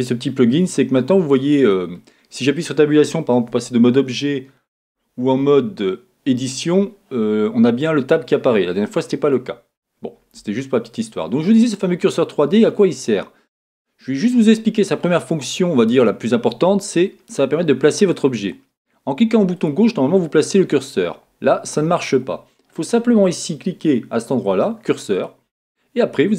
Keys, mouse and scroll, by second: 3.5 Tab, 7.8-18.3 middle drag, 18.3 click, 19.6 click, 25.1 click, 26.0 click.